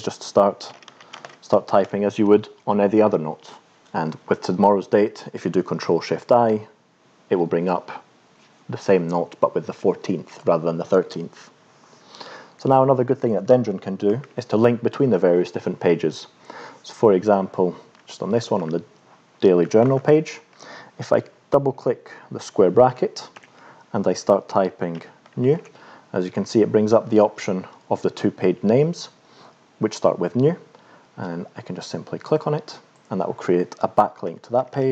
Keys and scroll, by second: 0.4-2.1 typing, 22.9 [, 23.3 [, 24.8-26.1 typing, 34.2 Return, 34.5 [, 34.7 [.